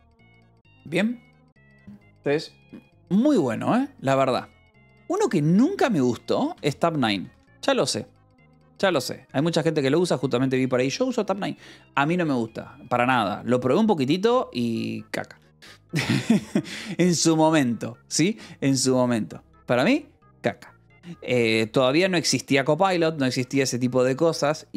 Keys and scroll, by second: 5.7-9.2 typing, 14.2 ctrl+=, 15.6 j, 21.9 j, 23.2 k.